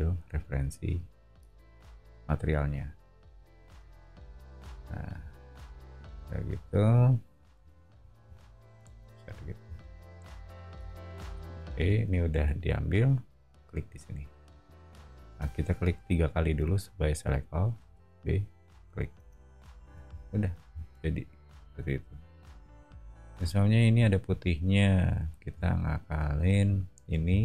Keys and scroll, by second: 3.7 space, 8.5 o, 11.2 b, 17.8 b, 19.2 space, 20.0 o.